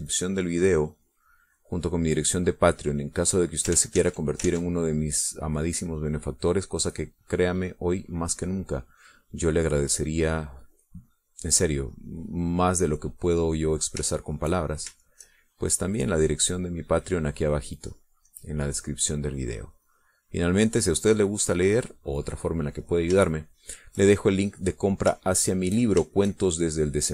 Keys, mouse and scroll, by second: 1.6-5.0 drag, 5.1 ctrl+z, 6.3 ctrl+click, 7.4-10.1 drag, 10.4-15.2 drag, 15.3 shift+click, 16.3 shift+click, 17.3-22.3 drag, 24.2 middle click, 24.6 shift+middle click, 26.6 shift+click.